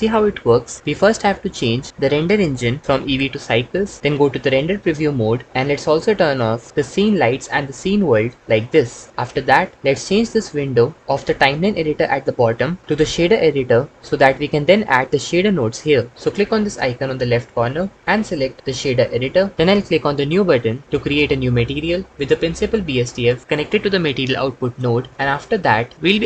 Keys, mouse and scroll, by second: 2.8 click, 6.0-8.8 drag, 17.5-19.5 drag, 24.0 click.